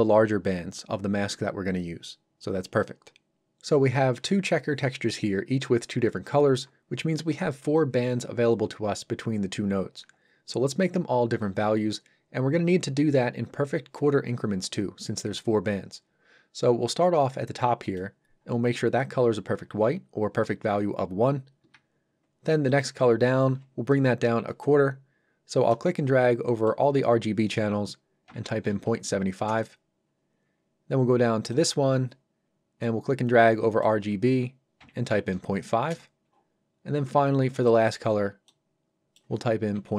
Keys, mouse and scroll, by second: 17.8 click, 21.6 Escape, 22.7 click, 28.6 KP_7, 29.5 Return, 31.5 click, 35.1 KP_5, 35.9 Return, 37.5 click.